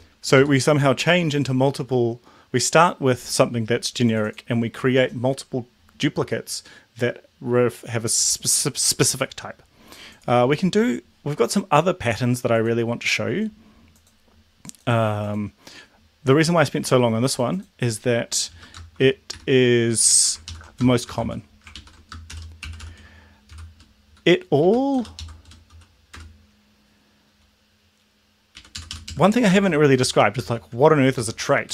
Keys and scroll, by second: 0.3 shift+Left, 19.3 Escape, 20.4 ctrl+shift+Left, 20.8-23.8 typing, 21.6 ctrl+shift+Right, 24.0 Left, 24.6 Right, 25.1 shift+Left, 25.7 r, 26.1 BackSpace, 28.5 Right, 28.7 Up, 28.9 Up, 29.0 Down, 29.5 ctrl+z, 31.2 Left, 31.6 BackSpace.